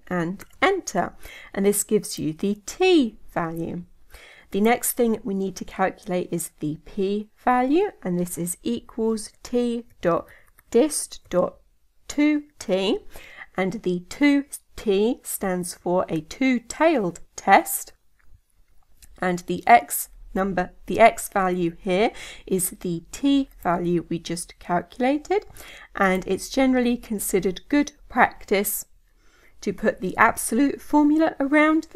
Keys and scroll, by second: 17.3 Tab.